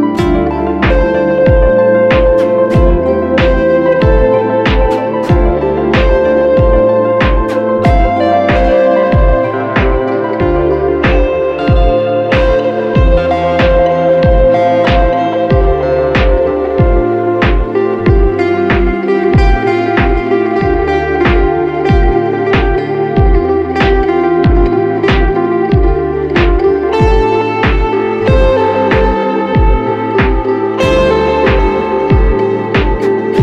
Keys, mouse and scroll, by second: 2.2 typing, 20.9 ctrl+t, 21.8 alt+shift+click, 24.0 Return, 25.1 click, 28.0 double click.